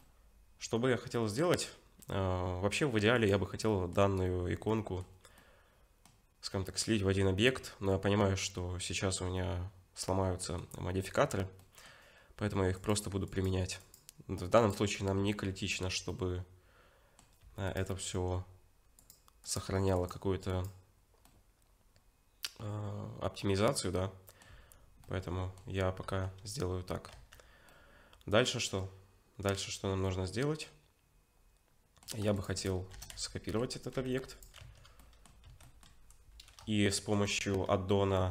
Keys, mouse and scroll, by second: 0.0 middle click, 3.2 click, 3.7 middle click, 4.7 middle click, 10.4 middle click, 11.6 middle click, 12.8 click, 13.8 click, 15.2 Tab, 16.1 middle click, 17.4 Tab, 17.7 click, 21.3 middle click, 24.5 Tab, 25.0 middle click, 26.0 2, 27.1 Tab, 27.7 middle click, 32.4 shift+click, 32.6-33.1 scroll down 5, 33.0 shift+d, 34.6 Tab, 35.0 middle click, 35.5 Tab, 35.6 middle click, 37.0 shift+middle click, 37.6-38.3 scroll up 3.